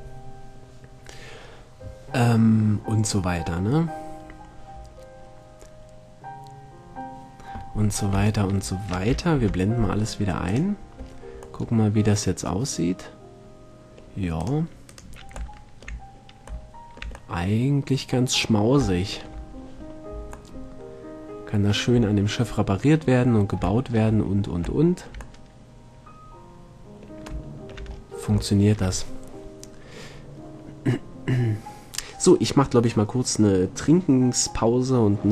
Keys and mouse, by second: 5.0-8.5 middle drag, 9.6 alt+h, 11.8-12.6 middle drag, 14.6-16.3 drag, 19.7 middle click, 22.9-25.4 middle drag, 27.4 middle click, 27.7-32.1 middle drag.